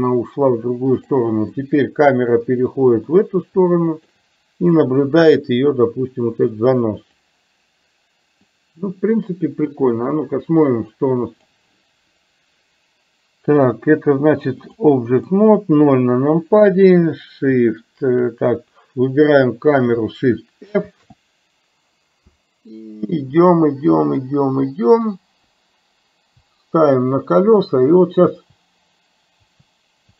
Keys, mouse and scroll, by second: 1.7-2.8 middle drag, 3.2-4.3 shift+middle drag, 5.8-7.3 drag, 8.5-11.7 drag, 14.7-15.5 drag, 15.8 KP_0, 19.4 click, 20.9 shift+f.